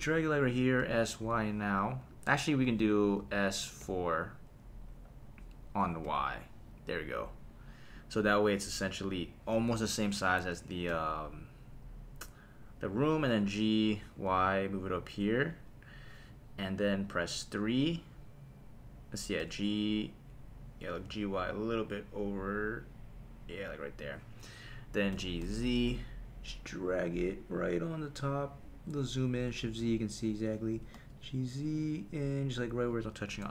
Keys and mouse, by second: 0.4 click, 0.8 s, 1.2 y, 2.5 Escape, 3.2 s, 3.8 KP_4, 6.0 y, 7.9 click, 9.8 KP_7, 10.9 g, 14.2 y, 15.5 click, 17.2 KP_3, 19.4 g, 21.1 y, 24.0 click, 25.1 g, 25.4 z, 28.2 click, 29.6 shift+z, 30.7 g, 30.9 z, 32.9 click.